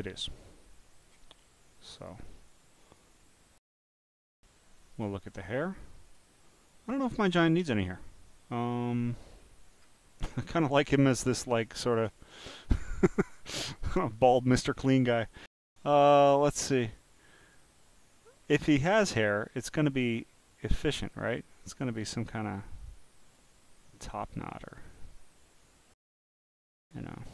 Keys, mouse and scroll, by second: 0.8 click, 2.0 click, 2.5 click, 4.9 click, 5.8 click, 7.2-7.8 scroll down 2, 9.4 scroll down 1, 9.4-9.9 scroll up 11, 11.0 click, 12.4 scroll down 5, 12.9 click, 13.8 click, 18.3 scroll down 2, 19.5-19.9 scroll down 2, 20.2 scroll down 2, 21.0 click, 22.0-23.3 drag, 26.3-26.6 scroll up 1.